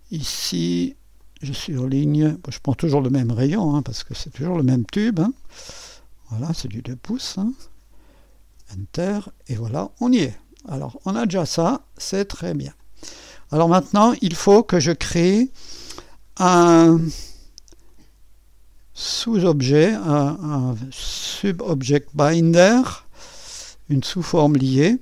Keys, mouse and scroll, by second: 1.2 click, 2.8 ctrl+v, 6.0 click, 7.3 click, 8.5 Return, 11.2-12.4 drag, 12.8 click, 17.9 click, 19.2 click, 20.2-21.3 drag.